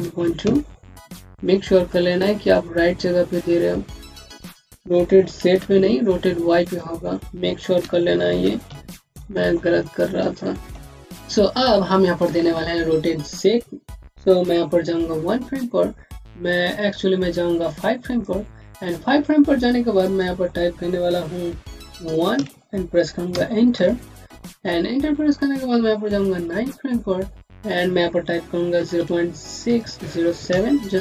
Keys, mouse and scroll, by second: 0.8 KP_Enter, 2.3 click, 6.5 click, 7.7 KP_Subtract, 8.3 KP_1, 8.5 KP_Decimal, 8.8 KP_2, 18.0 click, 22.7 KP_1, 23.2 KP_Enter, 25.9 KP_Enter, 26.3 click, 27.5 BackSpace, 28.6 KP_0, 28.9 KP_Decimal, 30.8 KP_7.